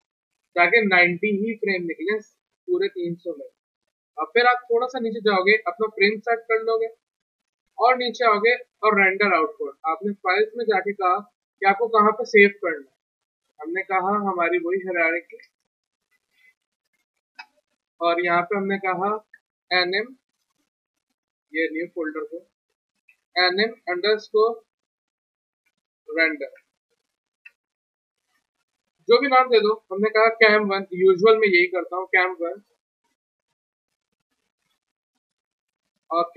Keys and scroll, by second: 12.8 alt+Tab, 13.6 alt+Tab, 14.0 alt+Tab, 15.1 alt+d, 15.4 ctrl+c, 16.1 alt+Tab, 16.8 ctrl+v, 17.4 Return, 19.5 a, 22.3 F2, 22.9-25.6 typing, 26.6 Return, 27.4 Return, 28.1-28.8 typing, 29.9-31.2 typing.